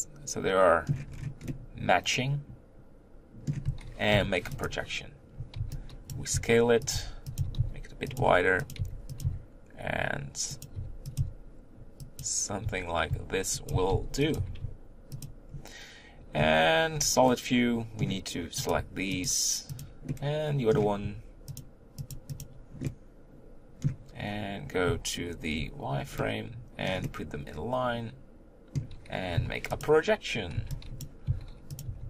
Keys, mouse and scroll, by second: 1.1-1.5 scroll up 3, 1.5-4.6 middle drag, 4.6 u, 6.1 b, 8.2 s, 8.8 g, 9.2 s, 10.7 g, 11.2 s, 13.7 s, 14.4 g, 16.9 z, 17.2-18.7 middle drag, 18.7 click, 19.2 shift+click, 19.8 shift+click, 20.0-21.6 middle drag, 21.6 shift+click, 22.1 shift+click, 22.4 shift+click, 22.8-25.5 middle drag, 25.5 z, 26.2-29.8 middle drag, 29.8 u, 31.0 b, 31.3 s, 31.8 g.